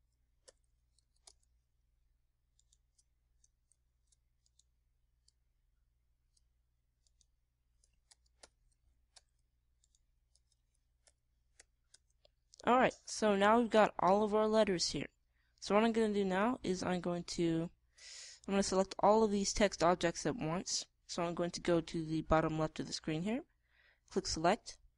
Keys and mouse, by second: 0.1 Tab, 1.4 BackSpace, 1.9 z, 2.2 Tab, 3.5-4.6 right drag, 4.6 shift+d, 6.2-7.8 drag, 8.0 click, 9.0 Tab, 9.3 BackSpace, 9.7 e, 10.1 Tab, 11.3 Tab, 12.0 BackSpace, 12.5 e, 12.9 Tab.